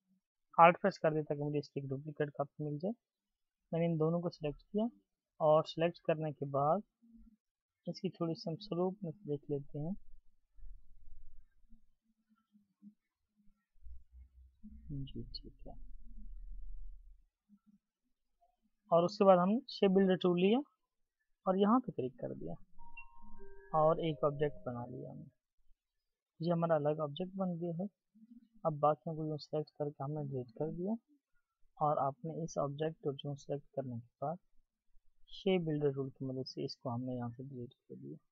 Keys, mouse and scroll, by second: 10.8 alt+click, 30.4 double click.